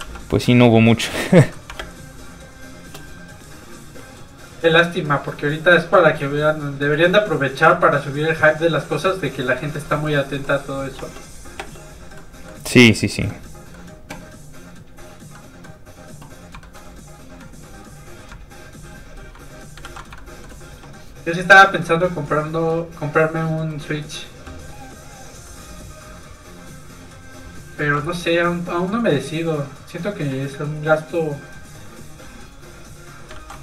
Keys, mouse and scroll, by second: 0.0 ctrl+z, 1.7 middle click, 1.8 shift+space, 2.8 shift+click, 2.9 shift+space, 3.9 click, 8.9 middle click, 9.9 shift+middle click, 10.1 middle click, 10.2 middle click, 10.9 space, 12.1 middle click, 14.5 click, 15.3 middle click, 16.6 shift+middle click, 18.3 ctrl+click, 19.8 ctrl+z, 20.1 shift+middle click, 20.7 middle click, 20.8 click, 22.4 ctrl+click, 23.7 ctrl+z, 24.4 z, 24.5 f, 24.6 click, 26.3 ctrl+click, 27.8 ctrl+z, 29.2 click, 33.3 ctrl+z.